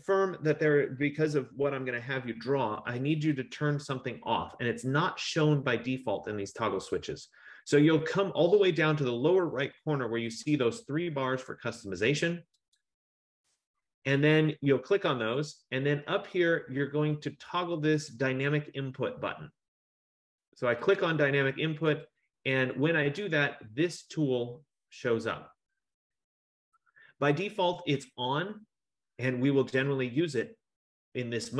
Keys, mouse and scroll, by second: 12.9-15.6 drag, 21.1 click, 22.2 click, 22.8 click, 26.6 F15.